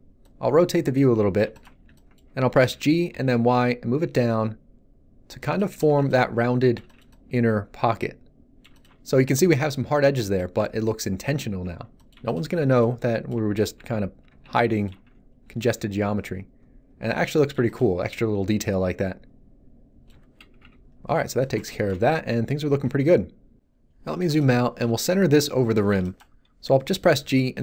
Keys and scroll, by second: 2.7 g, 3.1 y, 5.8 Tab, 13.6 z, 20.6 1, 27.2 g, 27.5 x.